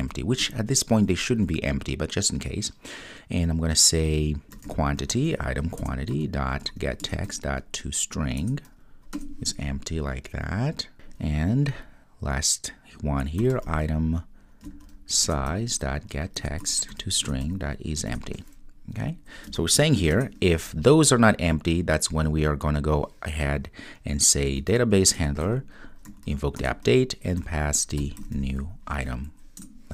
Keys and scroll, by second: 5.8 Return, 7.0 Return, 12.2 super+z, 15.3 Return, 25.2 Return, 26.0 Return.